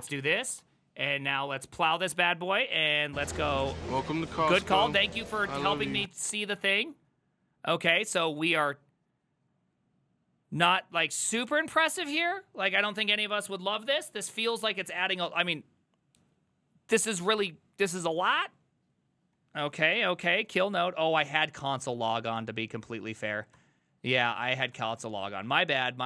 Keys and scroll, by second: 0.0-2.4 typing, 1.4 Up, 2.6 ctrl+Right, 2.8 ctrl+Right, 3.4 Right, 3.6 Right, 3.7-4.4 typing, 4.6 Return, 19.7 ctrl+a, 19.9 3, 20.3 ctrl+c, 20.4 ctrl+c, 20.6 ctrl+c, 20.7 ctrl+c, 21.0-22.4 typing, 22.4 ctrl+t, 23.6 ctrl+n, 24.3 ctrl+c, 24.6-26.0 typing.